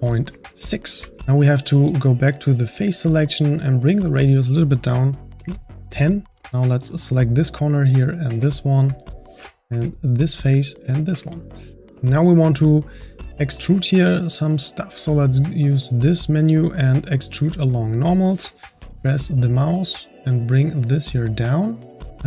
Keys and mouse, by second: 0.6 middle click, 1.1 click, 1.2-1.8 ctrl+middle drag, 1.8-8.5 drag, 8.5-10.2 middle drag, 10.2-11.3 shift+drag, 11.3-11.9 middle drag, 15.0-18.5 drag, 18.8-19.9 drag.